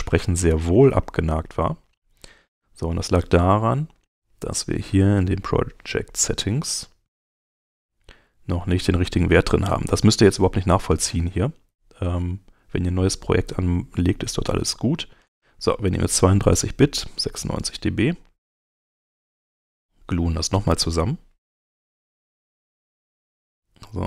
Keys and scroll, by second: 20.8 shift+super+g.